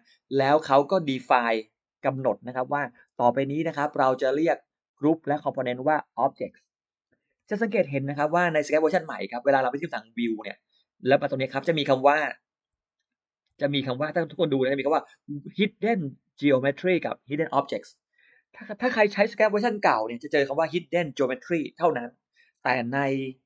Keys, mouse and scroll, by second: 8.3 click, 9.9 click, 12.7 ctrl+alt+middle click, 13.9 click.